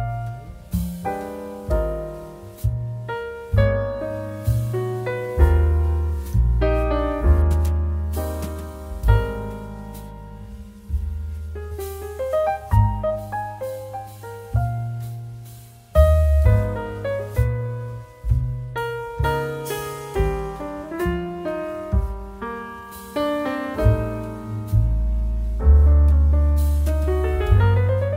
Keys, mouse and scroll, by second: 5.6-19.3 drag, 22.9 click, 23.0 click.